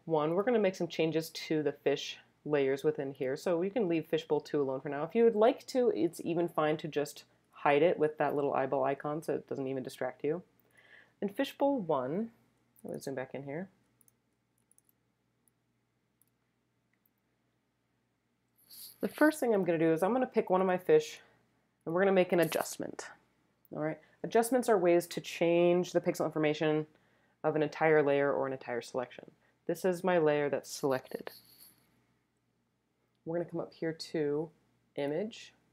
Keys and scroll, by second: 12.9 super+space, 14.1 space, 15.3 space, 15.8 space, 15.9 space, 16.0 space.